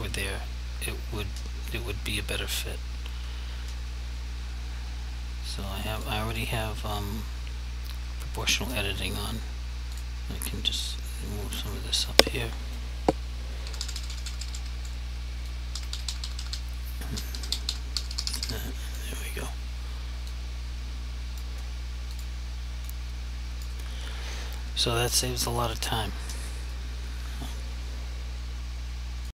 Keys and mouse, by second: 6.0 click, 6.4 double click, 10.0 click, 11.1 click, 12.1 right click, 13.7 Page_Up, 15.6 click, 15.8 Page_Up, 18.0 Page_Down, 20.4 click, 22.2 click, 23.0 click.